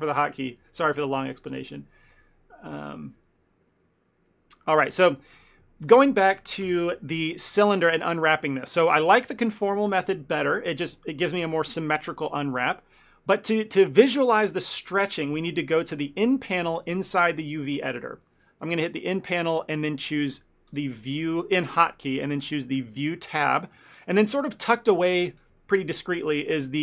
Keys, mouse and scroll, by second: 4.7 middle click, 5.0 ctrl+middle click, 5.3 shift+middle click, 5.9 click, 6.7 ctrl+l, 8.1 shift+middle click, 20.8 click.